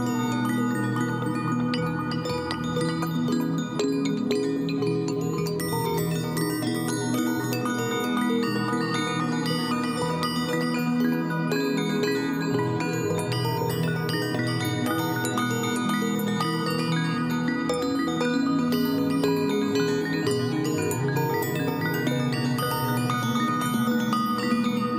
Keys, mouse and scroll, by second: 14.1 ctrl+j, 15.4 ctrl+=, 15.9 ctrl+=, 22.3 ctrl+click.